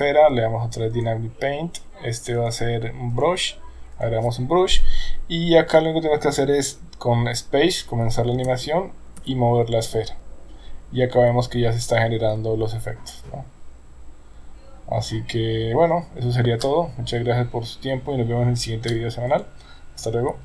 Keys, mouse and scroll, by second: 0.9 click, 2.4-3.2 drag, 3.9 click, 8.3 space, 9.2 g.